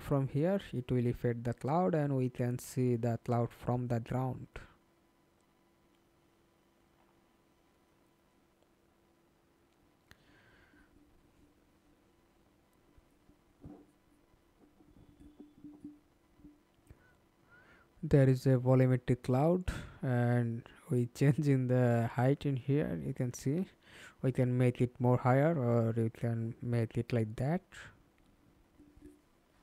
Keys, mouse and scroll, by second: 1.4-2.4 typing, 2.4 Return, 7.4-9.9 scroll down 4, 18.2-20.6 scroll up 2, 25.7 ctrl+space, 27.3-29.2 scroll down 1.